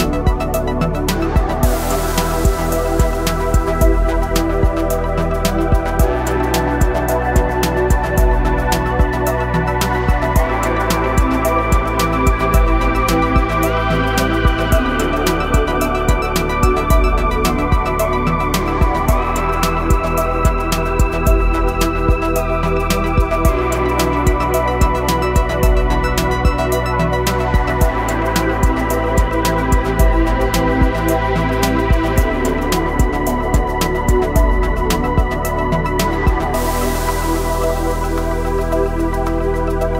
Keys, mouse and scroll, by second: 4.4 click, 4.7 click, 6.3 click, 7.7 ctrl+alt+shift+e, 8.4 click, 15.6 click, 18.1 scroll up 1, 19.6 click, 22.0 ctrl+0, 23.5 ctrl+alt+shift+e, 24.7 click, 25.8 shift+F5, 26.7 click, 30.0 click, 32.9-34.6 scroll up 1, 35.0 click, 39.0-39.9 scroll up 1.